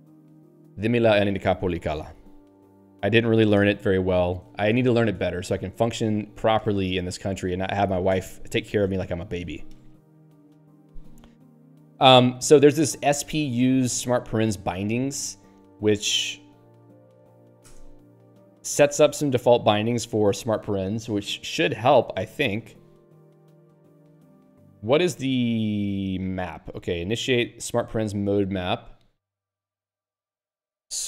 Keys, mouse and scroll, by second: 6.4 ctrl+g, 7.1 ctrl+p, 12.5 ctrl+n, 13.0 ctrl+f, 20.0 Return, 21.5-22.1 scroll down 3, 23.2 scroll down 3, 24.5 scroll up 1, 25.6 scroll down 1, 26.9 click, 27.6 middle click, 28.7 click, 28.8 click, 29.1 q.